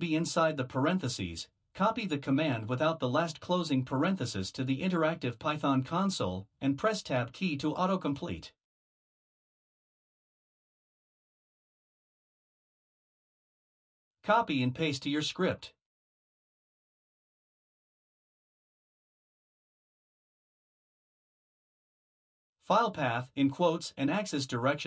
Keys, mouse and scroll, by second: 2.8 ctrl+v, 5.4 BackSpace, 7.9 Tab, 10.0 click, 11.0 click, 12.2 click, 14.9 ctrl+c, 18.8 click, 20.4 ctrl+v, 24.7 click.